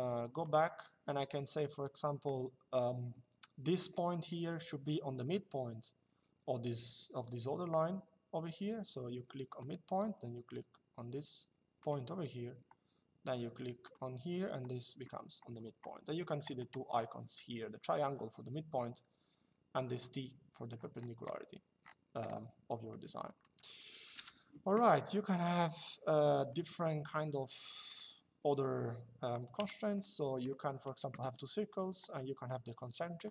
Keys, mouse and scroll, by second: 0.1 click, 9.2 click, 11.5 click, 13.5 click, 21.2 Escape, 22.6 click, 23.9 Delete, 26.2 click, 28.2 Escape, 29.6 click, 30.4 Escape, 32.9 click.